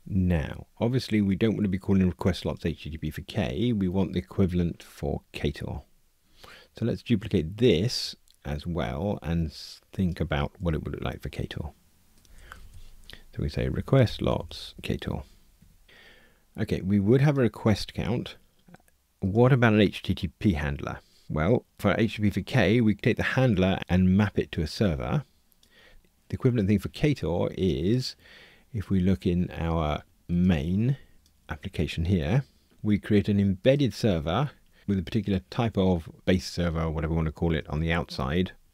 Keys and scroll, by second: 10.6 super+d, 15.6 Escape, 25.9 super+e.